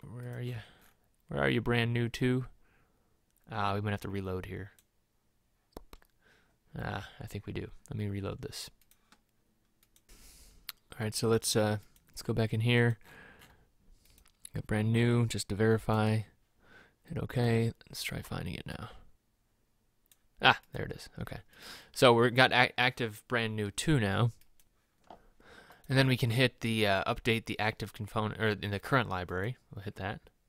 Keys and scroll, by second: 13.4-14.1 scroll down 2.